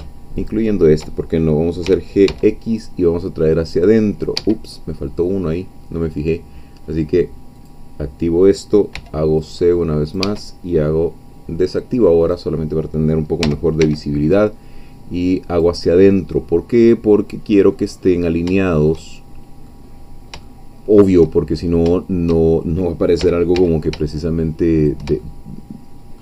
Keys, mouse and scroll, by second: 0.4 shift+click, 1.9 g, 2.2 x, 4.4 Escape, 7.6 click, 9.0 c, 9.4-10.8 drag, 10.2 Escape, 12.2-13.4 drag, 13.4 g, 13.8 x, 15.5 click, 16.0 scroll down 1, 16.2-18.0 middle drag, 18.0-18.4 scroll up 2, 18.6-19.9 shift+middle drag, 19.9-20.2 scroll up 2, 20.5 shift+middle click, 21.4-21.8 shift+scroll up 2, 23.2 g, 23.6 x, 24.8 shift+click, 25.4 shift+middle click.